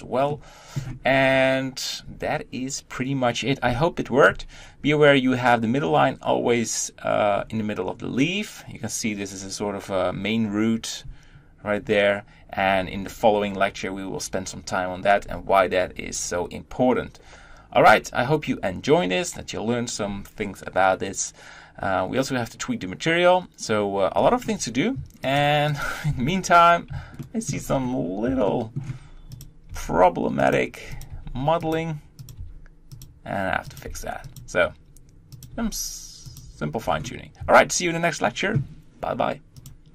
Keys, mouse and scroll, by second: 0.1-7.1 shift+middle drag, 7.1 scroll up 1, 12.8-24.0 scroll down 1, 24.0 scroll up 1, 25.1 click, 25.6 click, 25.9 Tab, 27.0 shift+middle click, 27.4 scroll up 3, 28.2 shift+middle click, 29.2 click, 29.5 g, 30.8 click, 30.9 g, 32.0 click, 32.1 g, 33.6 click, 34.0 g, 35.2 click, 35.3 g, 36.6-37.2 scroll down 2, 37.2 Tab.